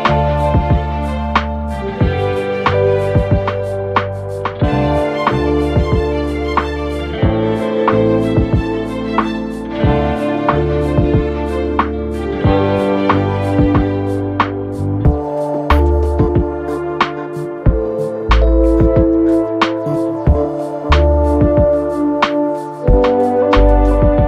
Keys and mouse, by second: 0.9 Delete, 2.4 click, 3.2 click, 3.4 click, 4.0 2, 4.5 click, 4.6 click, 5.0 ctrl+z, 6.1-7.7 right drag, 7.9 alt+click, 8.4 alt+click, 8.8 alt+middle click, 9.9 alt+middle click, 11.1 click, 11.6-13.1 drag, 13.3 alt+click, 14.3 3, 14.7 click, 16.1 alt+click, 17.7 Escape, 18.6 ctrl+z, 19.6 click, 20.2 alt+click, 21.3 alt+x, 21.7 click, 22.2 alt+click, 23.9-24.2 right drag.